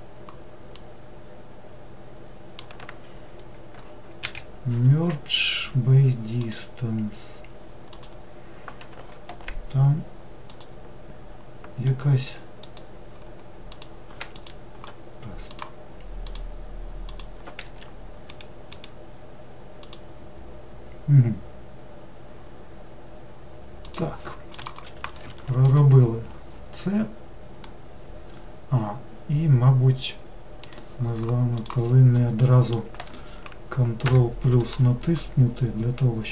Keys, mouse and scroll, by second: 0.8-4.0 middle drag, 4.3 m, 8.0 click, 9.3 alt+z, 10.5 click, 12.6-13.8 drag, 14.4 shift+click, 15.5 shift+click, 16.3 shift+click, 17.1 shift+click, 17.7 e, 20.0-21.9 right drag, 27.7-30.7 middle drag, 32.2-34.1 middle drag, 34.1 ctrl+KP_Add.